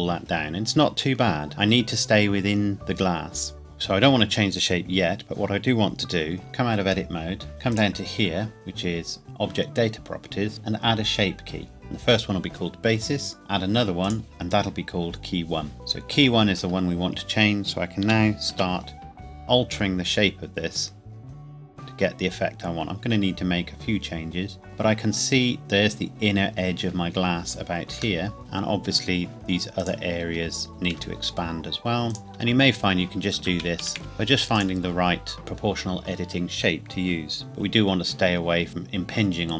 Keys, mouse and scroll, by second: 0.1 scroll down 1, 2.7-3.2 scroll down 1, 6.4 Tab, 7.7 click, 11.6 click, 14.0 click, 16.6 Tab, 18.0 g, 18.5 z, 20.3-21.1 scroll up 1, 22.3-22.8 scroll down 1, 25.0 click, 27.4 scroll down 1, 28.2 shift+middle click, 28.4 scroll up 1, 29.8 alt+click, 30.7 s, 30.9 Escape, 32.1 alt+click, 32.7-33.3 scroll down 1, 33.4 ctrl+z, 34.0 Tab, 34.5-35.2 scroll down 1, 37.4-37.9 scroll up 1, 37.9 scroll down 1.